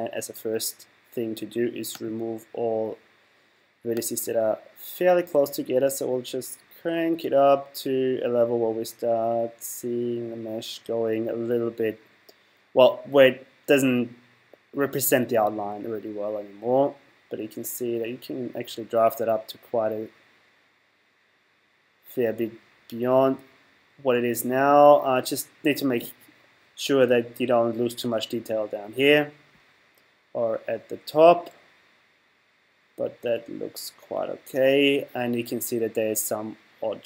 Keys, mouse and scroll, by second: 1.9 click, 4.0 click.